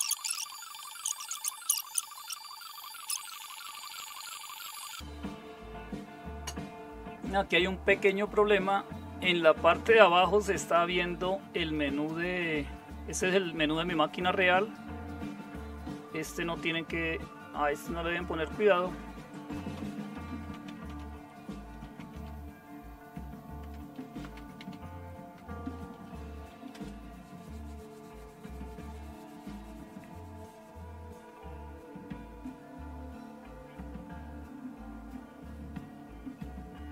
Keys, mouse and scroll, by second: 3.2 super+Right, 3.5 shift+super+=, 20.0-26.5 typing, 20.3 click, 23.6 Tab, 26.7 Return.